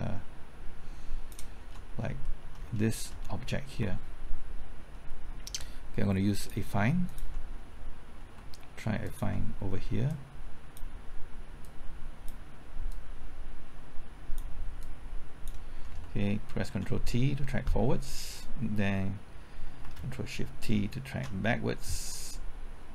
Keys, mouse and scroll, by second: 1.6-2.1 scroll up 1, 2.2 shift+middle click, 2.6 scroll up 1, 2.9 shift+middle click, 6.4 click, 9.0 ctrl+click, 10.1-11.2 drag, 11.2 click, 12.9-14.8 drag, 14.8 click, 16.7 ctrl+t, 19.8 typing, 21.1 ctrl+shift+t.